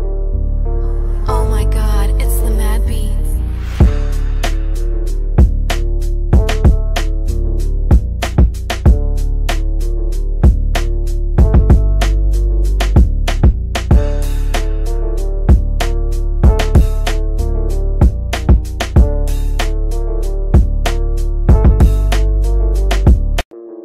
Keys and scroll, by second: 1.3 space, 6.9 c, 7.4 Escape, 22.7 shift+F2.